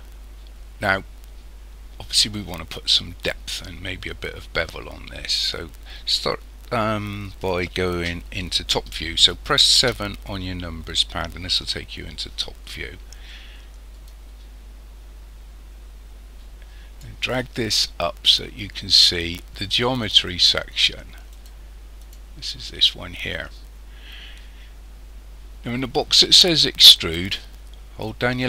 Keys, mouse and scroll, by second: 9.8 KP_7, 14.0 click, 21.3 click, 22.0 click, 28.0 click.